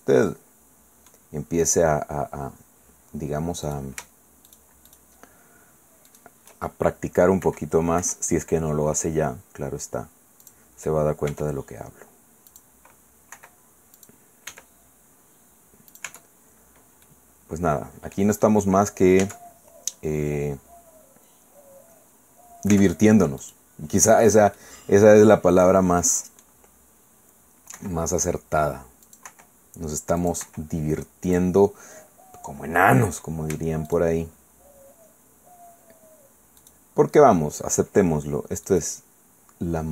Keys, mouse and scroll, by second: 1.3 middle click, 1.7-3.0 scroll up 2, 3.6 right click, 4.5 shift+right click, 6.1 shift+right click, 7.4 i, 10.4 click, 11.3 e, 12.5 click, 13.3 i, 14.0 middle click, 14.5 e, 15.9 click, 16.1 Tab, 16.4-17.0 scroll down 1, 17.0 middle click, 17.9 click, 19.2 Caps_Lock, 22.2-22.7 scroll up 2, 22.7 Tab, 23.4 right click, 24.6-26.6 drag, 26.6-27.3 scroll up 1, 27.7 i, 29.0 click, 29.3 i, 30.2 click, 30.4 i, 31.3 click, 33.0 click, 33.9 shift+middle click, 36.6 shift+right click, 38.7 shift+right click.